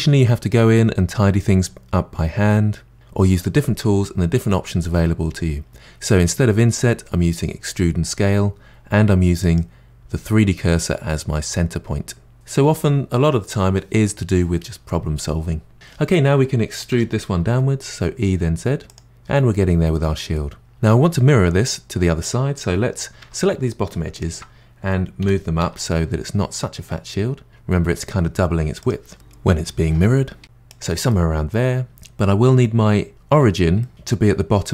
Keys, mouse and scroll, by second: 9.4-12.3 drag, 16.9 e, 20.3-21.3 middle drag, 23.2 2, 24.1 alt+click, 25.2 g, 30.3 middle click, 30.4 g, 31.1-33.0 middle drag, 33.8-34.7 middle drag.